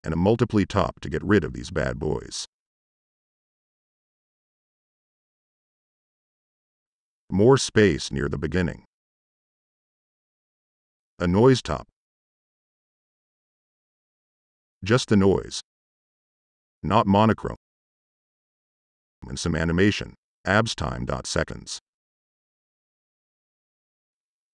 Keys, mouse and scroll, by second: 0.2 drag, 0.7 click, 1.3 drag, 1.8 click, 2.5-3.0 drag, 3.2 drag, 3.5-4.0 drag, 4.1-4.5 drag, 4.6-5.0 drag, 5.3 click, 6.8-7.3 right drag, 7.8 click, 9.5 m, 10.1 click, 10.2 click, 10.7 click, 11.2-12.1 typing, 11.9 click, 12.3 click, 12.8 click, 14.0 click, 18.5-18.9 drag.